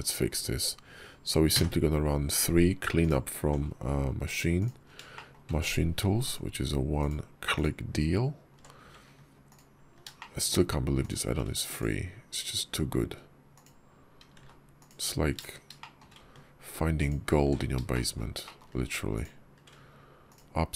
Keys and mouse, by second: 1.5 3, 2.9 click, 4.4 click, 4.5 middle click, 5.0 shift+click, 6.8 ctrl+click, 7.4 ctrl+click, 10.0 shift+click, 10.9 shift+click, 13.4 ctrl+click, 14.3 ctrl+z, 14.6 ctrl+click, 15.6 shift+click, 17.8 shift+click, 18.3 shift+click, 19.0 shift+click.